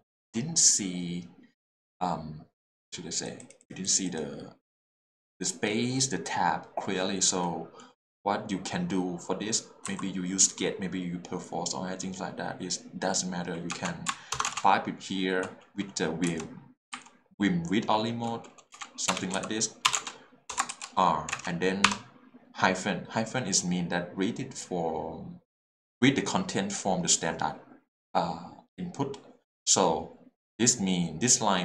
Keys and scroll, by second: 9.8 Print, 13.7 space, 14.5 shift+space, 16.9 v, 16.9 i, 18.7-21.4 typing.